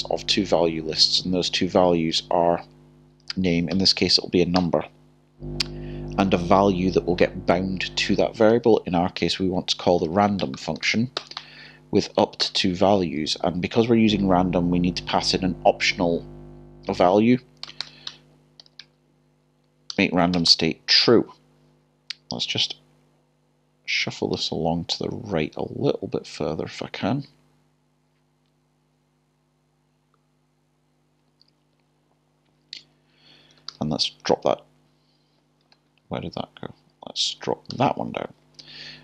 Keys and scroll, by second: 3.2 (, 4.6 typing, 9.0-10.5 typing, 12.4-13.5 typing, 18.6 typing, 19.6-21.2 typing, 35.4-37.3 typing, 38.2 Return.